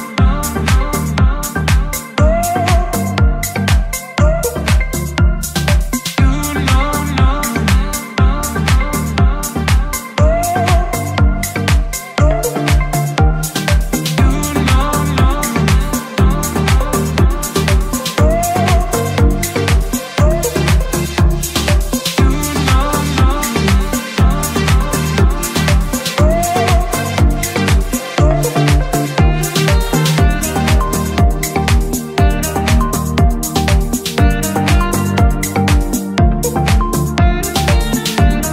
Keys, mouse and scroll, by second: 1.0 click, 1.7 click, 2.4 click, 3.2 click, 7.3 click, 9.7 click, 11.3 click, 11.8 click, 14.5 click, 15.9 2, 16.5-18.4 drag, 19.6-21.4 drag, 22.0-22.4 scroll down 1, 23.3 click, 23.7-24.8 scroll down 3, 24.8 click, 25.2 click, 25.5 click, 25.7 click, 27.0-28.4 scroll up 2, 28.4 click, 29.2-30.1 drag, 30.5-31.1 middle drag, 31.4 click, 32.8 a, 33.7 right click, 36.5-38.5 drag.